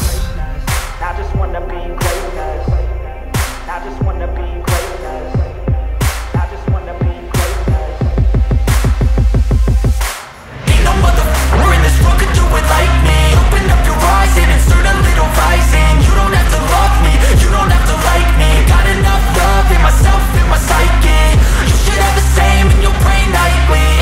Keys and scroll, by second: 0.1 Up, 0.4 Right, 0.7 Down, 10.9 ctrl+c, 12.2 space, 13.0 ctrl+v, 15.0 Delete, 23.2 Down, 23.5 Up.